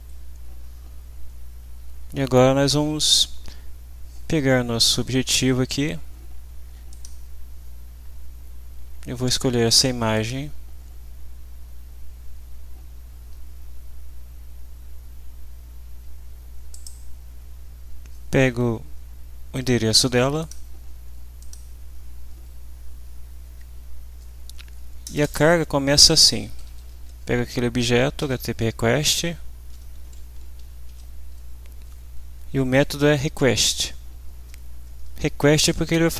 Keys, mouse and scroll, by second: 1.2 Up, 6.9 click, 10.1 click, 12.7-13.3 scroll down 1, 16.7 click, 20.4 click, 21.4 click, 22.9 Down, 23.4 Up, 25.1 Return, 26.1-28.2 typing, 30.6 r, 30.9 e, 31.8 Down.